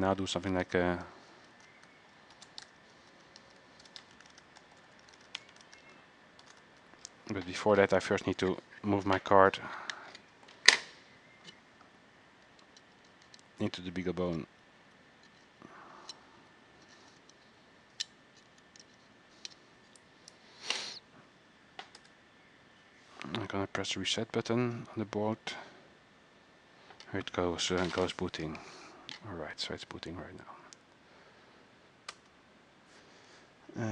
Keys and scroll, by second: 0.3-7.1 typing.